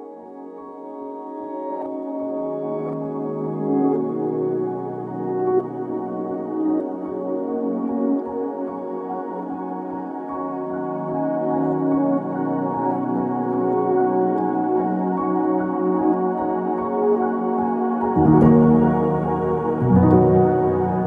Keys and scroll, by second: 2.4-5.5 typing, 12.7-14.5 typing, 20.7 0, 20.7 Return.